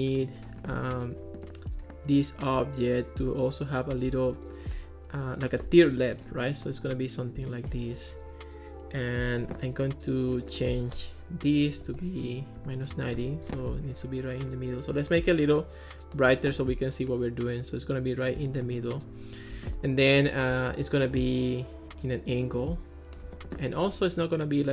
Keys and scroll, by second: 3.9 super+d, 11.4-12.6 typing, 12.6 Return.